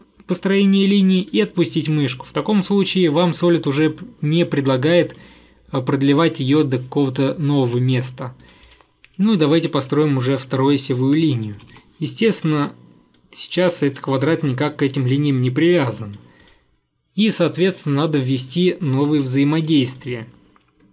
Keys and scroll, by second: 7.7 Escape, 8.8 Delete, 11.6 Escape, 11.7 Escape.